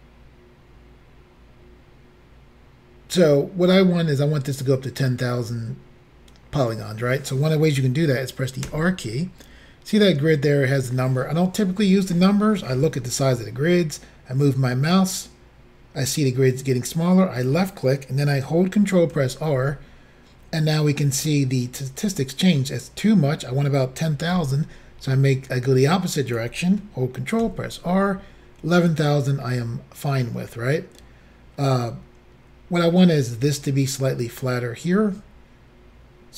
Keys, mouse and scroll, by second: 8.7 r, 17.4 click, 19.2 ctrl+r, 24.4 r, 26.3 click, 27.5 ctrl+r.